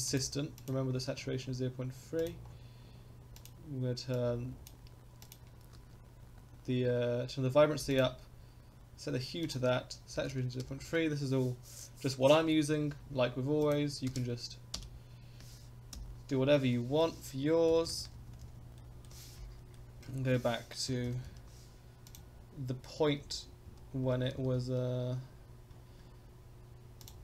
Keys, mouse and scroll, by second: 0.9-1.2 scroll up 4, 2.2 click, 2.4-2.9 scroll down 2, 3.3 click, 13.6-16.3 drag, 15.9 i, 16.7 middle click, 17.7 Left, 17.9 Left, 18.0 Left, 18.2 Left, 18.3 Left, 18.5 Left, 18.6 Left, 18.8-19.1 middle drag, 19.7-20.0 shift+middle drag, 20.2-20.9 scroll up 1, 20.9 Left, 21.1 Left, 21.3 Left, 22.0 click, 23.2 Left, 23.7 Left, 24.1 Right, 24.4 Right, 25.4-26.1 scroll up 7, 27.0 drag.